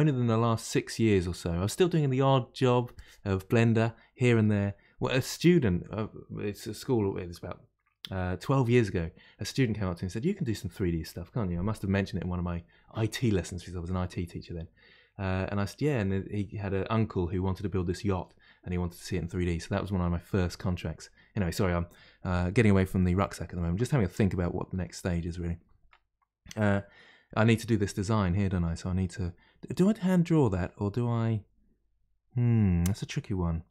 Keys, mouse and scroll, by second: 24.1-27.1 middle drag, 28.6-31.7 middle drag.